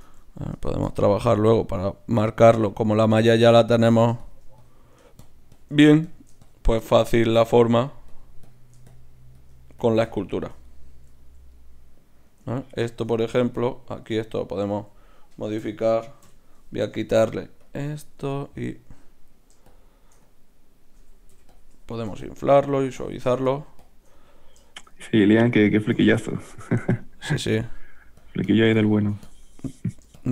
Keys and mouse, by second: 0.5 Tab, 1.0-3.7 middle drag, 3.7-6.8 drag, 6.8-13.2 middle drag, 7.5-12.2 drag, 13.5-15.3 drag, 15.6 KP_3, 16.2 k, 17.6-18.8 drag, 18.8-21.3 middle drag, 21.3-24.1 drag, 21.3 i, 24.1-26.8 middle drag, 26.8-30.3 drag.